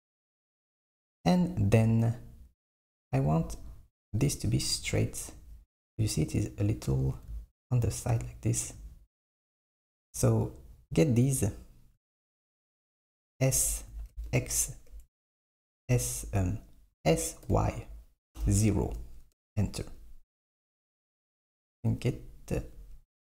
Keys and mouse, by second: 0.8 click, 3.1 click, 3.7 click, 4.3 click, 13.6 s, 15.5 s, 17.0 s, 21.4 click, 21.7 alt+click, 23.2 KP_1.